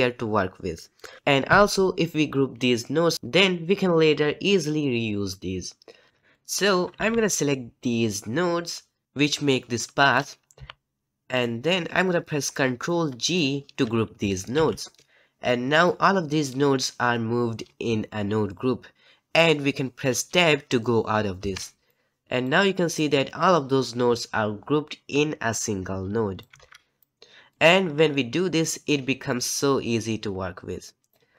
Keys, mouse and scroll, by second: 6.1 ctrl+z, 14.5 ctrl+g.